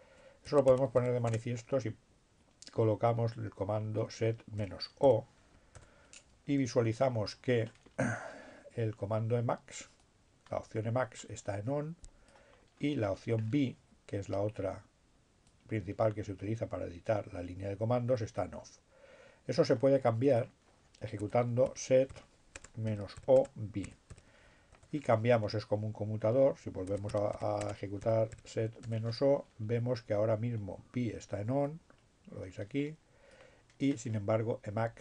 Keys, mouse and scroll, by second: 1.0 t, 1.2 space, 2.5-3.4 typing, 5.9 Return, 6.8-8.0 scroll up 2, 8.0-9.1 scroll up 1, 9.8-12.8 drag, 12.8 scroll down 2, 13.0 scroll up 1, 13.2-14.1 scroll down 1, 15.2-19.0 drag, 19.5 click, 20.4 click, 20.5-24.2 typing, 24.8 Return, 25.6 s, 27.0-28.7 typing, 31.8-33.7 drag.